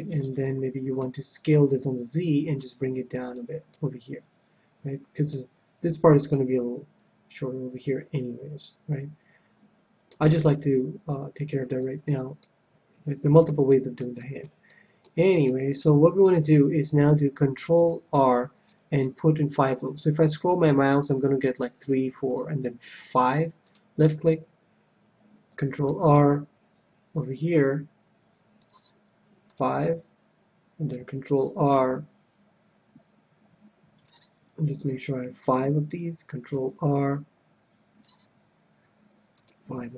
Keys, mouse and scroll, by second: 0.1-1.9 middle drag, 1.5 s, 3.2-5.0 drag, 3.6-5.3 middle drag, 6.3-8.0 middle drag, 11.8 a, 12.4-16.9 middle drag, 15.7 KP_7, 17.8 ctrl+r, 23.7-25.4 drag, 25.8 ctrl+r, 29.5-31.2 drag, 30.9 ctrl+r, 35.4-37.2 drag, 36.5 ctrl+r, 39.4-39.9 drag.